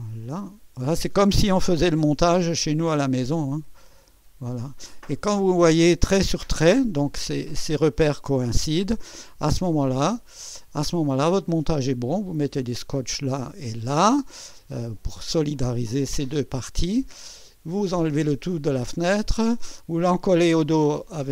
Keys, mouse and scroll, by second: 1.8 Left, 9.9-10.6 ctrl+scroll down 2, 11.1 ctrl+middle click, 16.8 scroll down 2.